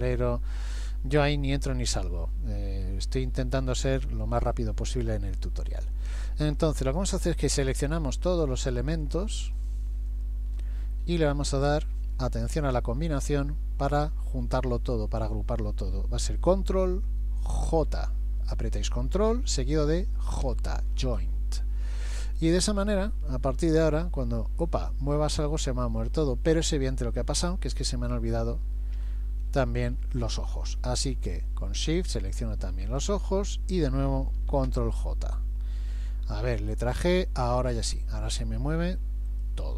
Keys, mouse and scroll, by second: 2.9-3.2 scroll up 1, 7.8 shift+click, 8.3 shift+click, 9.1 shift+click, 9.6 shift+click, 10.1 shift+click, 10.9-11.6 scroll down 2, 12.7 shift+middle click, 20.5 ctrl+j, 22.4 click, 23.6 g, 29.6-29.9 scroll up 1, 30.3 middle click, 30.3-31.8 scroll up 1, 32.1 shift+click, 32.9 shift+click, 34.7 ctrl+j, 36.9 g.